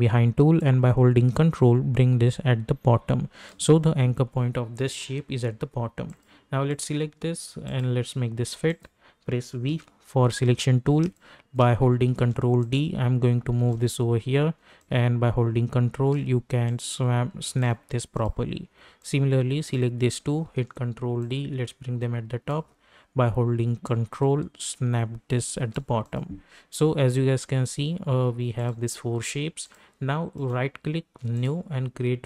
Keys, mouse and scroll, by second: 0.6-6.1 drag, 9.7 v, 10.4-10.9 alt+scroll up 1, 11.0 space, 11.1 click, 11.5 space, 12.1 ctrl+d, 12.7-14.8 drag, 14.8-20.5 drag, 20.5 ctrl+d, 21.3-26.0 drag, 26.4-28.2 scroll down 1, 28.5 click, 29.6 click, 30.3 right click, 31.3 click.